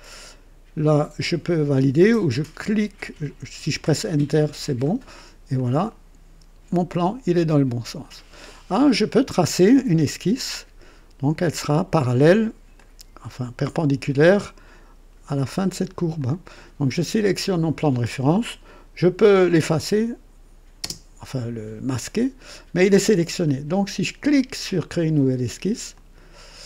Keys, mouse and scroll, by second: 4.2 Return, 5.5-8.2 drag, 8.5 click, 10.5-11.8 drag, 12.7 click, 16.1-16.7 drag, 16.9 click, 20.8 space, 25.9 click.